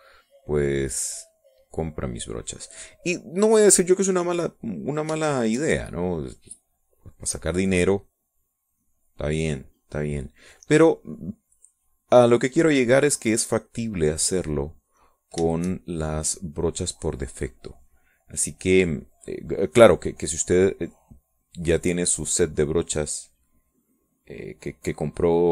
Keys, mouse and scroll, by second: 3.6 click, 5.5 middle click, 6.5 shift+click, 7.0-9.2 shift+drag, 9.2-10.4 drag, 10.4 click, 11.5 middle click, 12.2 middle click, 13.7-16.6 drag, 16.7-19.3 shift+drag, 19.6-25.5 drag.